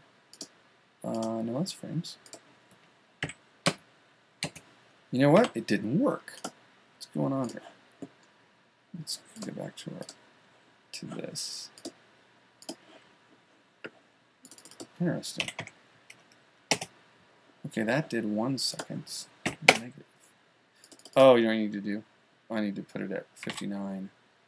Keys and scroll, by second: 23.9 typing.